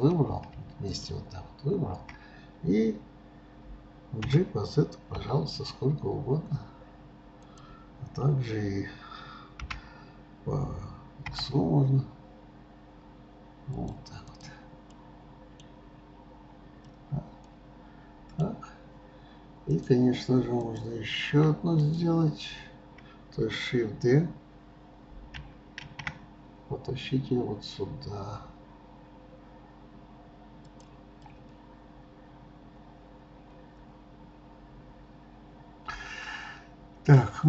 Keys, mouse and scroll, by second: 0.1 click, 0.9 shift+click, 14.7 click, 15.0-16.2 middle drag, 16.2-17.0 scroll up 2, 17.0-20.1 middle drag, 20.1 click, 21.0 click, 21.8 shift+click, 31.3-34.2 middle drag.